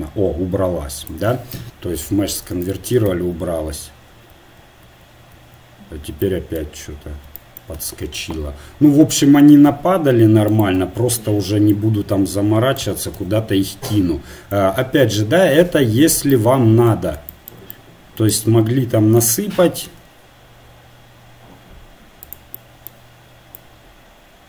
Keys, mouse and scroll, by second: 3.1 Tab, 4.3 Tab, 4.9 Tab, 5.3 Tab, 10.5 click, 13.5 KP_1, 19.6 r, 23.5-24.4 drag.